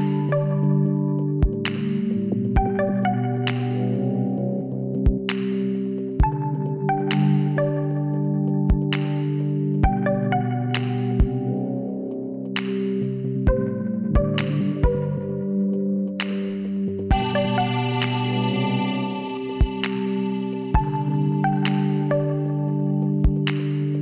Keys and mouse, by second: 2.2-3.7 middle drag, 5.9 click, 10.4 x, 12.1 z, 12.3-13.8 middle drag, 14.9 z, 15.5 middle click, 16.1 z, 17.2-19.0 drag, 18.7 l, 19.6 click, 21.6 middle click, 22.5 a, 22.8 a.